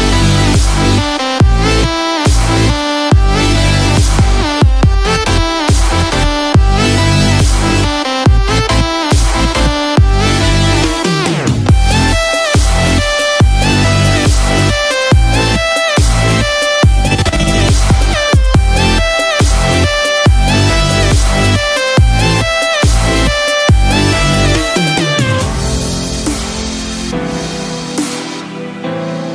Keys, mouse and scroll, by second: 0.5 click, 0.9 shift+click, 1.7 click, 3.1 click, 4.2 ctrl+click, 5.1-5.5 scroll down 1, 5.5 shift+middle click, 5.9 scroll up 2, 6.6 shift+middle click, 7.0 shift+scroll up 1, 9.7 shift+middle click, 12.9 a, 21.4 click, 25.6 click.